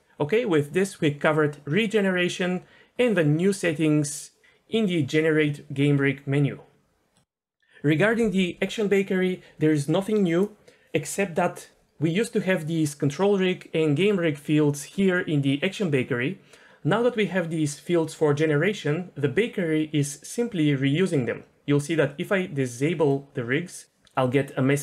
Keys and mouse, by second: 2.2-6.7 drag, 16.5 Tab.